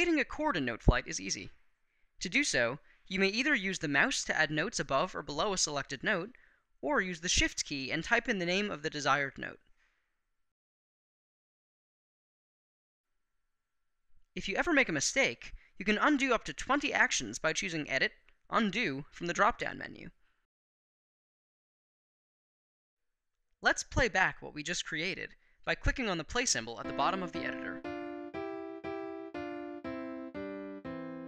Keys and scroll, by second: 7.3 shift+g.